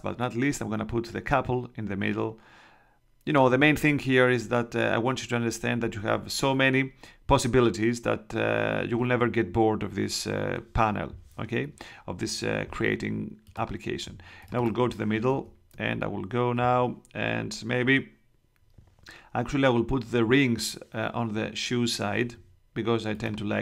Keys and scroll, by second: 15.2 super+Tab.